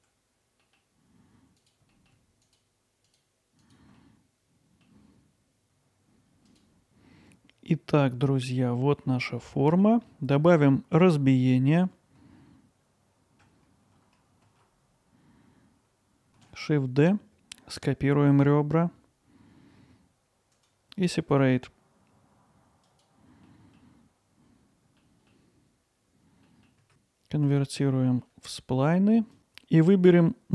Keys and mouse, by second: 0.1 middle click, 0.2 right click, 1.0 middle click, 1.2 click, 1.3 alt+middle click, 1.6-2.8 middle drag, 3.8 alt+middle click, 4.1 alt+middle click, 4.9 alt+middle click, 6.5 click, 8.7 middle click, 9.4 alt+middle click, 10.1 middle click, 13.1 ctrl+r, 15.1 click, 15.5 alt+middle click, 16.4 shift+d, 17.0 click, 17.8-20.6 alt+middle drag, 20.6-23.1 right drag, 23.5 middle click, 24.0 middle click, 24.5-25.3 middle drag, 25.3 click, 25.5 middle click, 25.8 middle click, 26.2 click, 26.7 right click, 28.2 alt+middle click, 29.4-30.5 right drag.